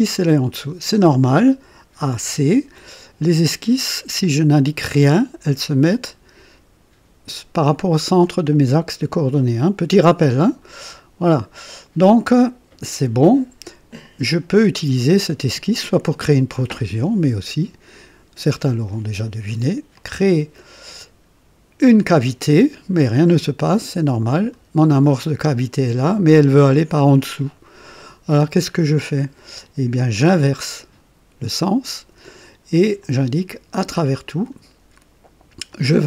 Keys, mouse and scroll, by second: 0.0-0.4 typing, 1.7-3.9 typing, 2.7-7.5 drag, 8.3-12.5 drag, 9.4-13.0 typing, 14.0 click, 15.7-16.5 typing, 19.9 click, 23.2-24.7 drag, 27.3-28.9 drag, 30.1 click, 33.0 click, 33.9 click, 35.7 click.